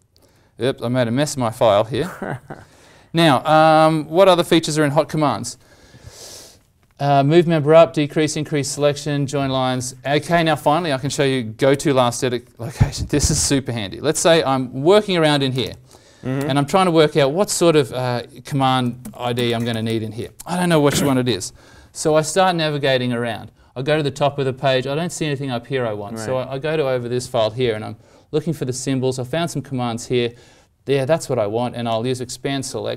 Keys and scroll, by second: 0.2 ctrl+z, 4.3 alt+Tab, 11.7 alt+Tab.